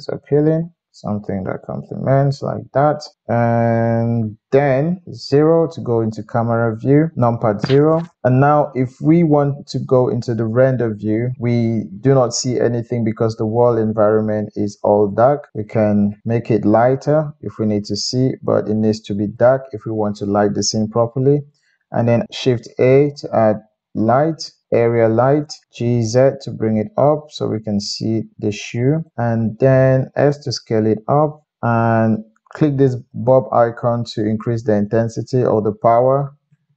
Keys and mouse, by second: 1.2-4.7 middle drag, 4.8 KP_1, 5.0 KP_0, 5.1-6.4 middle drag, 7.0-9.5 shift+middle drag, 9.5 click, 9.7-18.4 middle drag, 19.4-20.5 middle drag, 23.6 shift+a, 25.6 g, 29.6 middle click, 30.3 s, 30.8-32.0 middle drag, 32.3 middle click, 32.8 middle click, 33.8 middle click, 34.5-35.6 middle drag, 35.6-36.7 drag.